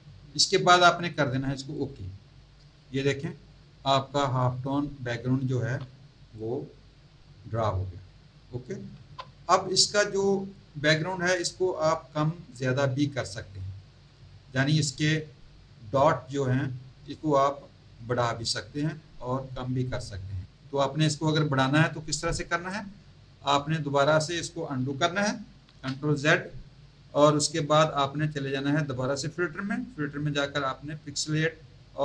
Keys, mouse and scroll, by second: 1.7 click, 5.5 z, 6.2 click, 8.9 z, 10.8 click, 25.7 ctrl+z, 29.1 click.